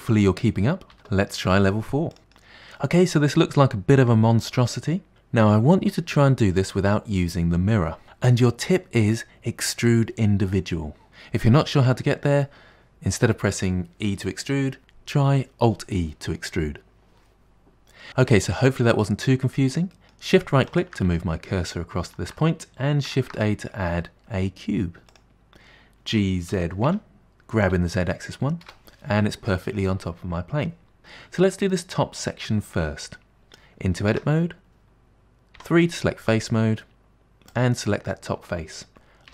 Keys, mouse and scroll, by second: 1.0 KP_Decimal, 1.4-6.4 middle drag, 18.1-20.0 scroll down 1, 20.0 middle click, 20.8 shift+right click, 21.2-23.2 shift+middle drag, 23.2 shift+a, 26.2 g, 34.2 Tab, 35.6 3, 37.6 click.